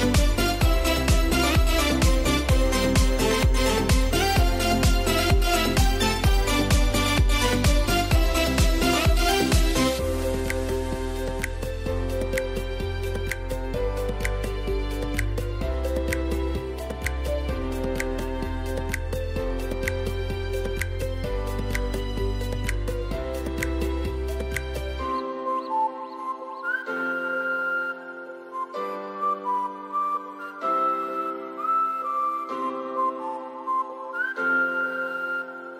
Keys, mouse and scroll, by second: 1.7-3.4 alt+drag, 3.8 scroll down 1, 5.6 scroll up 1, 5.8 ctrl+z, 7.3 scroll down 1, 8.0 scroll up 1, 8.5 space, 9.5 ctrl+0, 11.9 ctrl+shift+a, 17.9-23.1 drag, 18.1 typing, 20.7 typing, 25.3-33.4 drag, 34.0 scroll down 1, 35.1-35.7 drag.